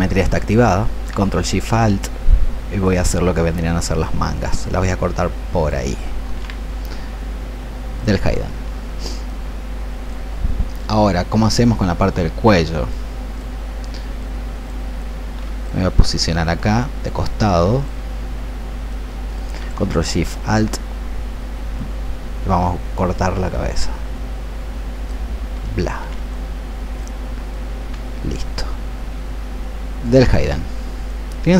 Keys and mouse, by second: 2.7-19.4 ctrl+alt+shift+drag, 21.6-31.5 ctrl+alt+shift+drag.